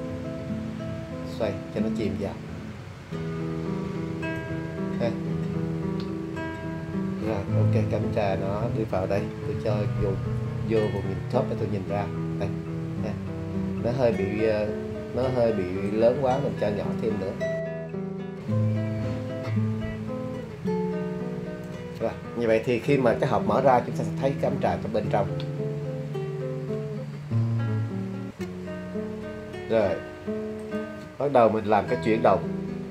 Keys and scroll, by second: 9.5 `, 14.9 super+z.